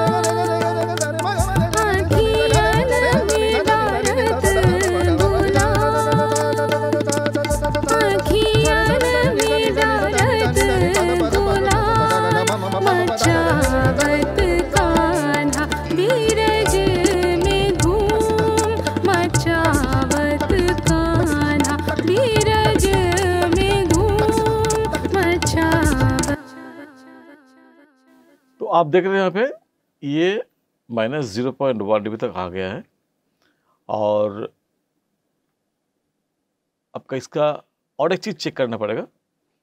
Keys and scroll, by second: 26.2 space.